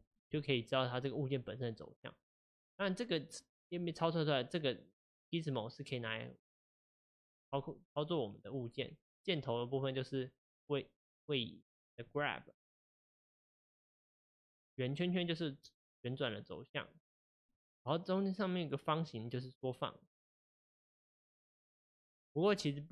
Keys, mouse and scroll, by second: 0.3 click, 0.7 click, 6.1 click, 8.3 click, 9.9 click, 11.6 click, 14.4 click, 16.7 click, 19.1 click.